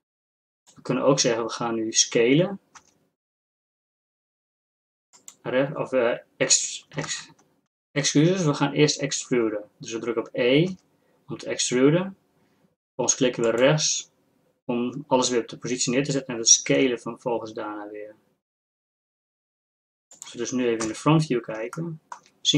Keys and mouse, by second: 2.8 e, 7.1 ctrl+z, 10.7 e, 16.8 s, 20.9 KP_1, 22.2-22.5 drag.